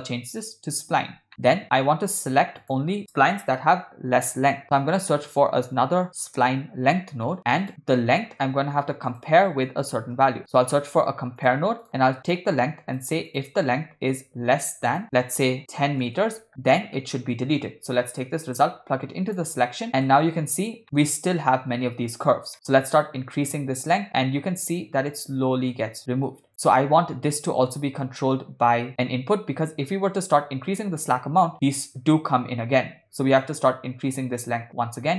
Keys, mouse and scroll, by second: 1.3 middle click, 2.0 shift+a, 8.5 shift+a, 12.4-13.0 drag, 13.3-16.1 drag, 16.7-17.0 middle drag, 18.2 drag, 18.9 click, 19.9 middle click, 20.8 shift+middle click, 22.5 middle click, 23.5-26.5 drag, 29.7-31.5 drag, 33.5-35.1 drag.